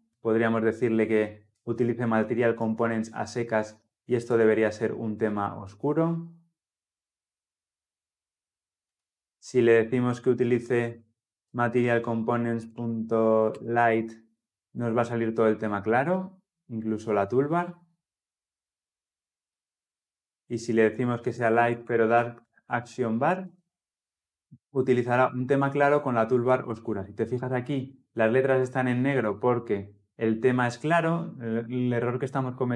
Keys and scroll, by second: 4.2 shift+F10, 13.4 Return, 14.9 Return, 15.0 shift+F10, 23.3 Tab.